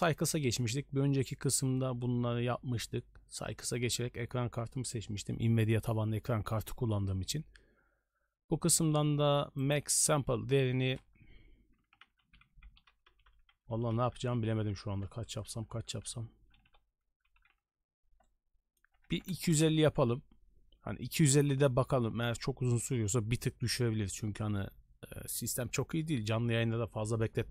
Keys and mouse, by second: 9.6-19.7 drag.